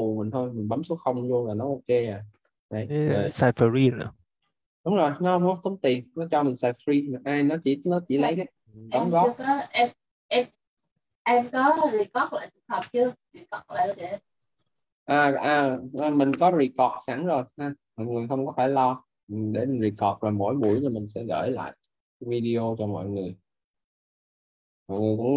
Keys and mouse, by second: 1.3 0, 3.6 Return.